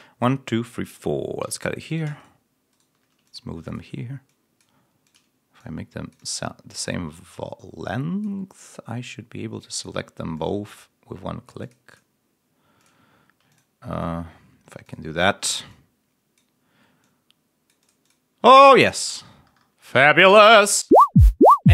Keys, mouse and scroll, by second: 1.3 s, 1.8 shift+click, 8.5-9.9 drag, 10.2-12.0 drag, 12.7 ctrl+click, 13.0 ctrl+scroll up 1, 13.4 ctrl+click, 13.9 ctrl+click, 15.2 ctrl+scroll up 1, 18.3-19.3 ctrl+scroll down 3, 20.5 click, 20.8 space.